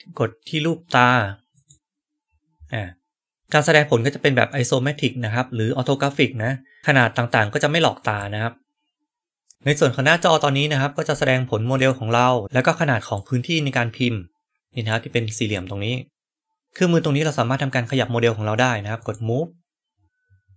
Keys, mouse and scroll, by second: 1.5 right click, 3.4-6.8 right drag, 7.1-7.8 middle drag, 8.1-9.5 right drag, 11.7 right click, 13.1-14.8 right drag, 15.4-16.6 right drag.